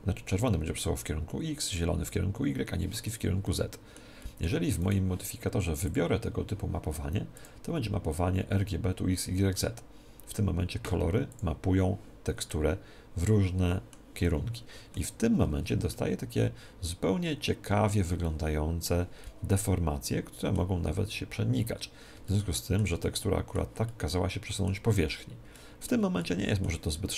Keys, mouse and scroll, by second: 3.4-5.8 middle drag, 4.8-6.6 right drag, 5.8-9.1 drag, 12.4-14.1 middle drag, 15.5-17.6 middle drag, 18.2-21.0 middle drag, 22.2-27.1 middle drag.